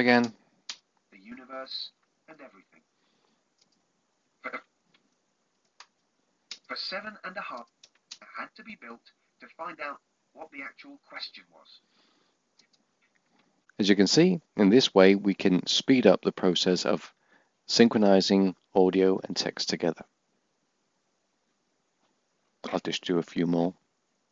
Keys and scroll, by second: 0.9 Tab.